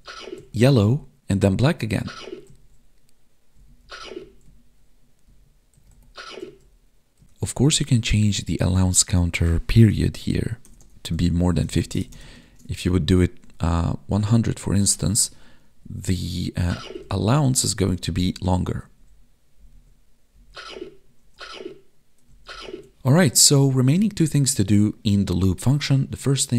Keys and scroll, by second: 0.4 Up, 1.8 Left, 2.0 Down, 2.5 Right, 3.5 Up, 3.8 Left, 4.2 Down, 4.4 Right, 5.2 Down, 5.7 Right, 5.8 Up, 6.4 Left, 7.2 Right, 10.1 Left, 12.4 ctrl+s, 13.6 Tab, 15.8 Up, 16.7 Left, 17.4 Down, 17.7 Right, 18.3 Down, 18.8 Left, 19.5 Down, 19.7 Right, 20.3 Down, 20.5 Left, 21.2 Up, 22.2 Left, 22.6 Up, 22.9 Right.